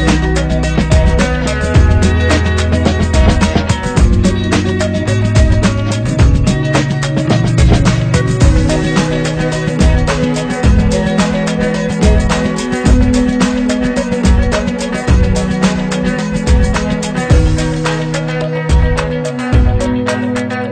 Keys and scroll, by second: 0.2 ctrl+[.